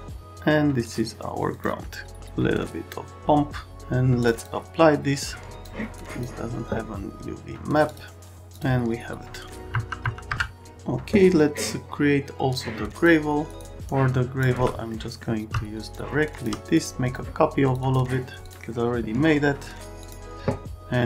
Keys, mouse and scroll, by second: 0.8 click, 1.5 click, 1.9 click, 4.2 click, 4.4 click, 5.2 click, 6.0 click, 7.9 click, 8.5 click, 10.0 F2, 10.3 F4, 13.6 click, 13.9 click, 14.9 right click, 15.9 shift+click, 16.8 click, 17.0 click, 17.6 click, 17.8 click, 18.4 click, 20.0 click.